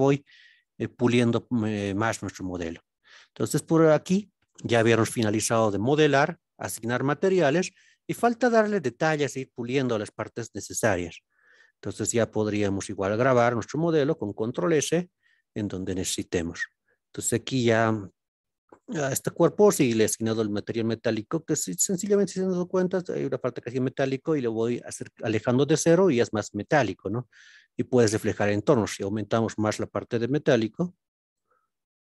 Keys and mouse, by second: 0.5 ctrl+b, 1.8 click, 2.7 Tab, 4.0-5.6 middle drag, 7.0 click, 10.3-12.6 middle drag, 13.3-13.7 middle drag, 14.2-15.2 middle drag, 15.8-17.7 middle drag, 19.3 click, 22.5-22.9 drag, 26.5-28.2 middle drag, 30.4-31.3 drag, 31.7-32.0 middle drag.